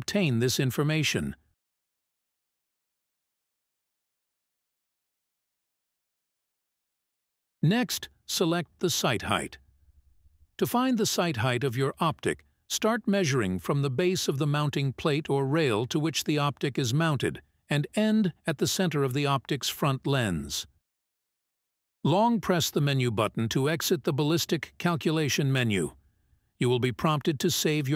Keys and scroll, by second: 15.5 Menu, 17.0 Menu.